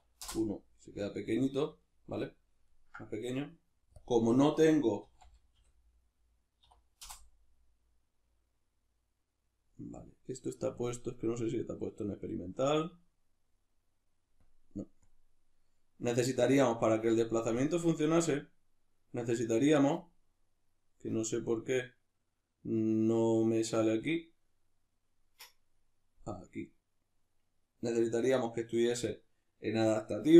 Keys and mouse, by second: 0.3 Return, 1.8-4.0 ctrl+middle drag, 4.0-10.9 drag, 7.1 Return, 12.1 drag, 12.9-14.4 middle drag, 14.4-17.7 drag, 19.0-24.1 middle drag, 24.1-25.1 drag, 25.1-30.3 middle drag, 26.6 click.